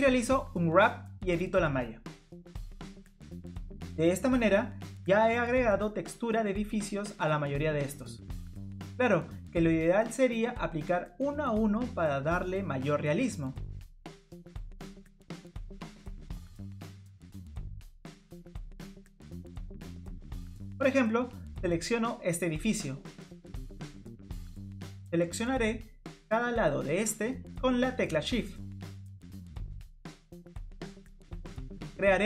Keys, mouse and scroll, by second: 0.6 click, 4.1 click, 4.3 middle click, 4.3 scroll up 1, 4.7-5.1 scroll down 4, 11.3 click, 11.7 middle click, 14.4 click, 14.7 middle click, 18.1 scroll down 1, 18.3-18.8 scroll up 4, 19.7 click, 20.5 Tab, 20.8 click, 21.3 middle click, 21.6 scroll up 1, 22.2 shift+click, 22.9 shift+click, 23.8 middle click, 24.8 shift+click, 25.1 middle click, 26.4 shift+click, 26.7 shift+click, 26.9 shift+click, 27.2 shift+click, 27.6 shift+click, 27.8 shift+click, 28.1 shift+click, 28.5 shift+click, 28.9 middle click, 29.8 shift+click, 30.1 shift+click, 30.1 shift+click, 30.5 middle click.